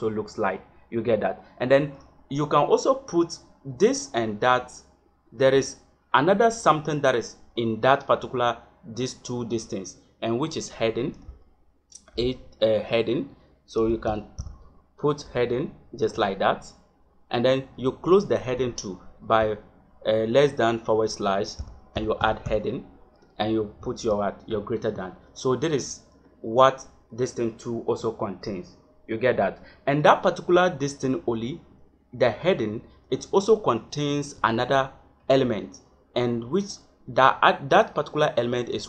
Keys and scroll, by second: 11.0 shift+,, 12.0 h, 13.7 e, 14.0 a, 14.4 d, 15.9 shift+., 18.2 shift+,, 19.3 /, 21.6 h, 21.9 e, 22.2 a, 22.4 d, 23.7 shift+., 34.3 Return.